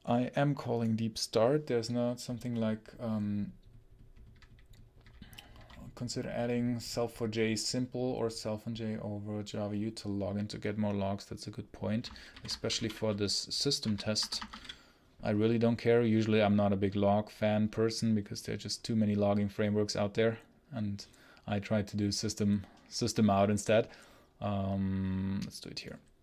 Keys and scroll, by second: 12.2 ctrl+shift+n, 12.2-15.0 typing, 13.7 Return, 14.0 Escape.